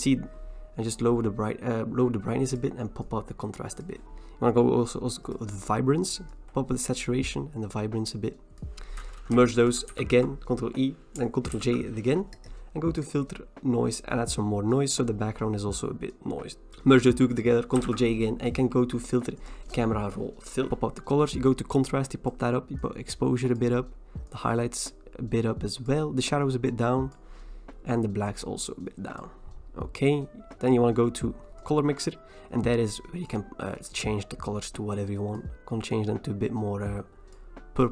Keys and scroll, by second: 9.9 ctrl+e, 11.6 ctrl+j, 16.7 ctrl+e, 17.8 ctrl+j.